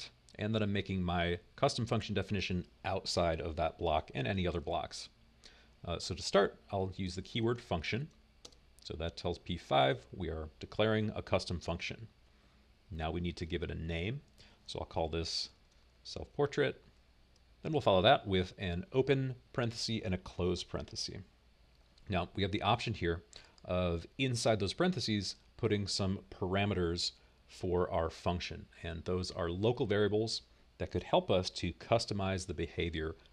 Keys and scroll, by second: 7.3-9.3 typing, 11.1-12.1 typing, 13.8-17.5 typing, 20.2-21.2 typing.